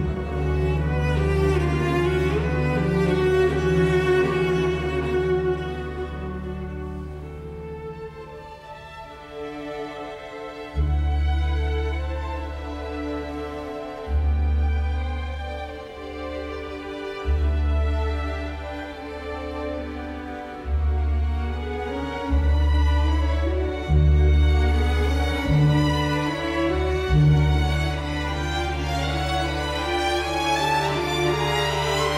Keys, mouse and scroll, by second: 0.2 KP_Decimal, 1.2 Return, 1.6 space, 2.4 Delete, 3.1 Escape, 4.5 space, 5.9 Delete, 13.8-14.5 typing, 15.6 Delete, 17.9 space, 19.2 Delete, 21.8 middle click.